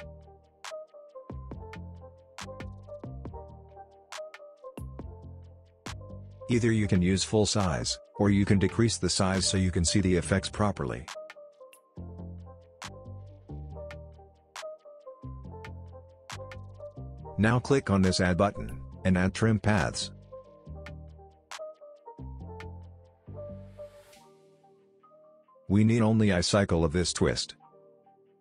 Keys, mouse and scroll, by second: 7.5 click, 8.3 s, 9.0 click, 9.0-11.8 drag.